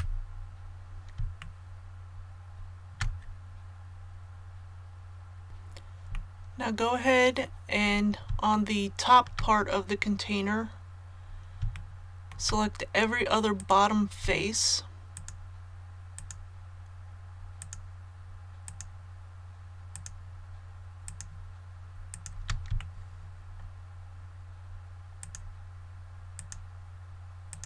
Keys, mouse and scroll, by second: 0.3 scroll down 1, 1.4-5.4 shift+middle drag, 5.4 click, 6.2 middle click, 6.8-7.9 scroll up 1, 8.5 shift+middle click, 10.0-10.7 scroll up 1, 11.7 shift+middle click, 13.5 right click, 15.1 shift+right click, 16.1 shift+right click, 17.6 shift+right click, 18.6 shift+right click, 19.9 shift+right click, 21.0 shift+right click, 22.1 shift+right click, 22.8 shift+middle click, 25.2 shift+right click, 26.3 shift+right click, 27.5 shift+right click.